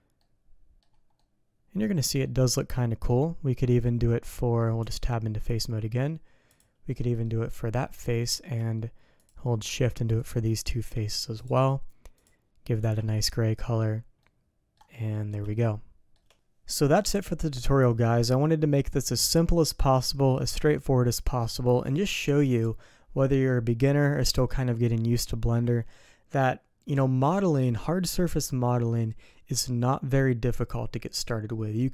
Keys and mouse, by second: 0.2 click, 1.1 click, 2.2 middle click, 4.8 Tab, 6.5 click, 6.8 middle click, 7.7 middle click, 9.2 shift+click, 10.2 shift+click, 11.3 click, 12.2 click, 12.8 Tab, 13.2 click, 14.2 click, 15.1 click, 15.5 shift+click, 16.3 ctrl+s, 24.2-25.3 drag.